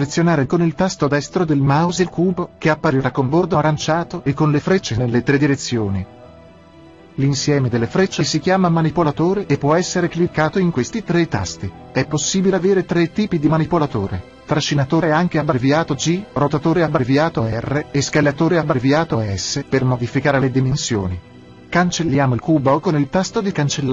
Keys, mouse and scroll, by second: 1.2-3.0 right drag, 1.9-10.5 middle drag, 15.3-23.9 drag.